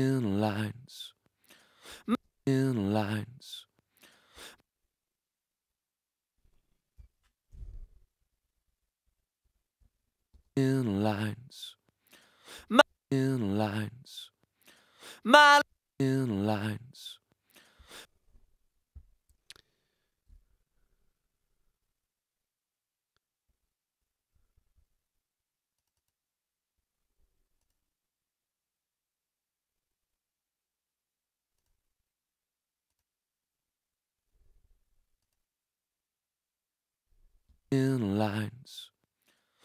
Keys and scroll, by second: 1.9 space, 7.5 alt+super+], 10.3 alt+super+space, 10.8 space, 15.4 space, 17.8 space, 20.5 super+z, 23.5 super+z, 37.4 space.